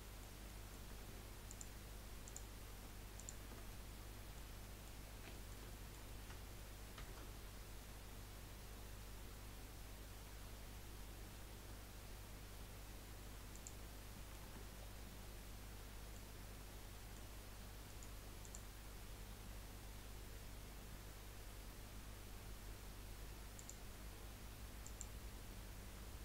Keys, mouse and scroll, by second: 1.5 alt+shift+click, 2.2 alt+shift+click, 3.2 alt+shift+click, 3.7-5.0 middle drag, 5.0 scroll up 1, 5.3 shift+middle click, 5.6 scroll up 1, 5.8-7.0 middle drag, 7.0 ctrl+b, 14.0 scroll down 2, 14.1 middle click, 14.5 Tab, 14.8 scroll down 1, 15.1-16.4 middle drag, 16.4-16.8 scroll up 3, 17.0 middle click, 17.9 right click, 19.0-19.3 scroll down 3, 21.9 scroll down 2, 23.6-24.9 drag, 25.1-26.2 drag.